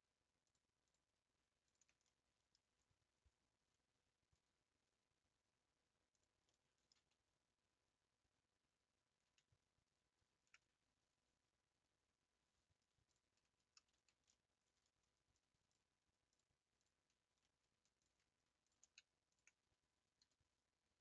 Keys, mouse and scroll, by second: 0.5 ctrl+click, 0.9 ctrl+click, 1.7 ctrl+Left, 2.0-4.9 middle drag, 4.9 e, 6.5-10.2 middle drag, 10.2 ctrl+z, 13.2 shift+Left, 13.9 ctrl+z, 14.3 middle click, 15.1 3, 15.7 shift+Left, 16.4 shift+Left, 16.8 shift+Left, 17.4 middle click, 18.0 ctrl+Left, 19.4 ctrl+Left.